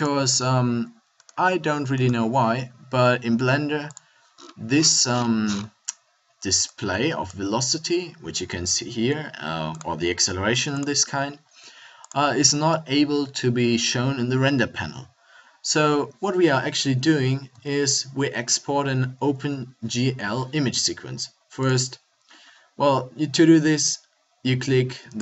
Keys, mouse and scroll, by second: 0.0 F12, 18.5 a.